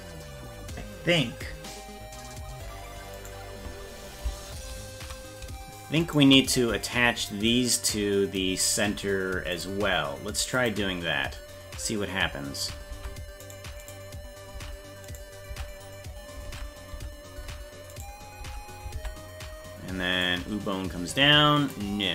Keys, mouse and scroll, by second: 3.2-4.7 right drag, 6.0 shift+right click, 9.5 click, 10.6 click, 12.9 ctrl+Tab, 13.9 right click, 14.5 Tab, 15.1 right click, 15.5 Tab, 16.5 ctrl+Tab, 18.5 Tab, 19.0 ctrl+Tab, 20.2-21.7 drag.